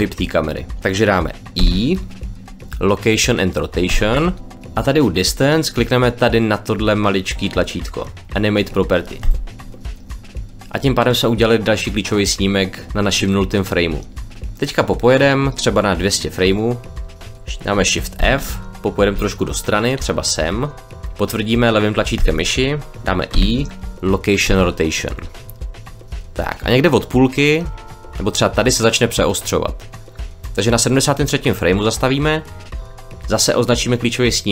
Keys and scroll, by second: 1.5 i, 18.1 shift+f, 19.0 d.